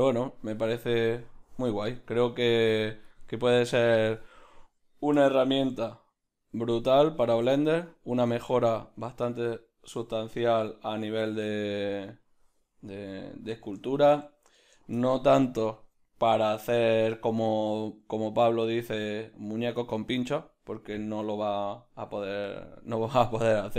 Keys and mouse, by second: 0.4-8.1 drag, 5.2 n, 13.0-23.5 ctrl+middle drag, 23.5-23.7 drag.